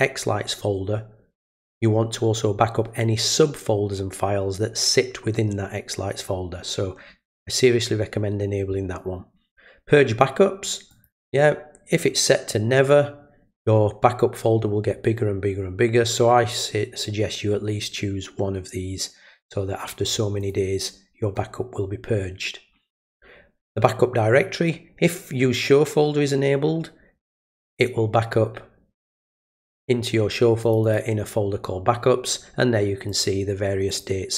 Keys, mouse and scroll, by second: 10.9 click, 20.4 click, 27.7 click, 29.0 click, 30.6 click, 30.8 click, 33.1 click, 33.9 click.